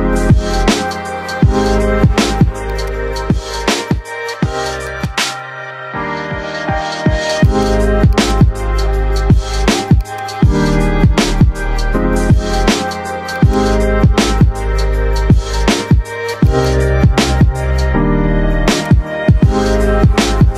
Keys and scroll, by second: 0.2 5, 0.4 Return, 5.4 4, 5.7 5, 6.0 Return.